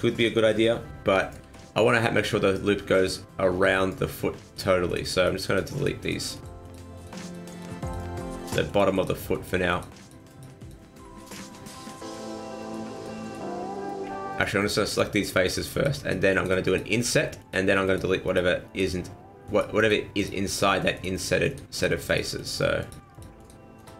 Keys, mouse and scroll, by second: 1.8 middle click, 4.5 right click, 4.9 shift+right click, 5.1 right click, 5.5 shift+right click, 5.7 shift+right click, 6.0 shift+right click, 6.3 shift+right click, 6.6 shift+right click, 6.9 shift+right click, 7.2 shift+right click, 7.5 shift+right click, 7.8 shift+right click, 8.4 shift+right click, 8.7 shift+right click, 8.9 shift+right click, 9.3 shift+right click, 9.7 shift+right click, 10.0 shift+right click, 10.3 shift+right click, 10.6 shift+right click, 11.2 shift+right click, 11.5 shift+right click, 12.0 shift+right click, 12.6 shift+right click, 12.9 shift+right click, 13.2 shift+right click, 13.7 middle click, 14.3 shift+right click, 14.6 shift+right click, 14.9 shift+right click, 15.1 shift+right click, 15.5 shift+right click, 15.7 shift+right click, 15.9 shift+right click, 16.3 shift+right click, 16.7 shift+right click, 17.0 shift+right click, 17.4 shift+right click, 17.9 shift+right click, 18.3 shift+right click, 18.7 shift+right click, 19.5 shift+right click, 19.8 shift+right click, 20.1 shift+right click, 20.5 shift+right click, 20.9 shift+right click, 21.5 shift+right click, 21.7 shift+right click, 22.1 shift+right click, 22.3 shift+right click, 22.8 shift+right click, 23.1 shift+right click, 23.4 shift+right click, 23.8 shift+right click.